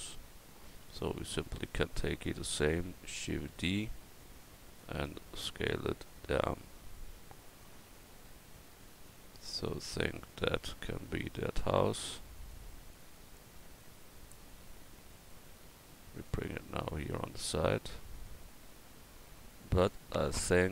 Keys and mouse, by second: 1.8-2.9 drag, 3.4 shift+d, 4.2-6.3 drag, 5.2 s, 7.0-8.3 drag.